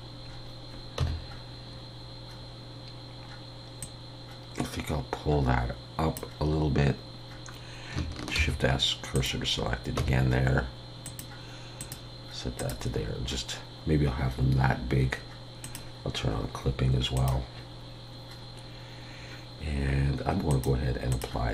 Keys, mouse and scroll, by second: 0.3 scroll down 2, 1.0 Tab, 1.0-2.7 scroll up 1, 3.8 click, 8.3 shift+s, 10.0 Tab, 11.0 click, 15.6 click, 18.1-19.0 scroll down 1, 19.0-19.7 scroll up 2, 20.5 click.